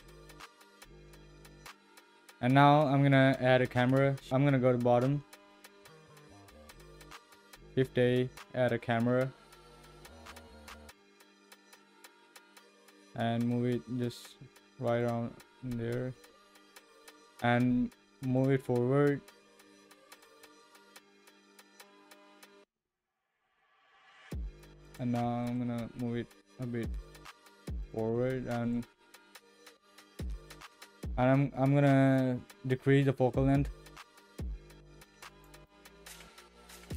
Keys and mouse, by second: 0.1-0.9 shift+middle drag, 6.0-6.6 shift+middle drag, 7.6 shift+a, 10.7 ctrl+alt+KP_0, 12.2 g, 16.1 g, 20.4 g, 25.2 g, 28.1 g, 30.0 click, 33.0-34.2 drag, 34.2-35.4 middle drag, 36.0 g.